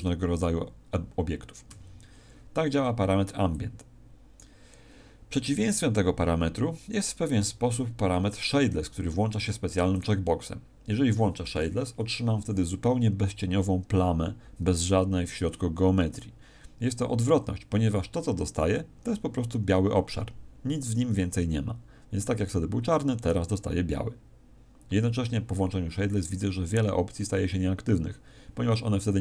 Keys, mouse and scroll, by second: 1.6 Escape, 3.4 click, 9.9 click.